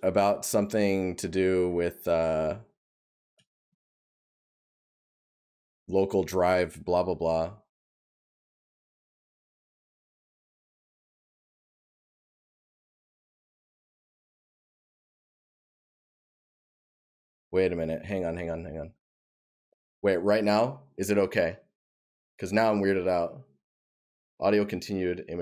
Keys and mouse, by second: 2.8 right click, 5.4 right click.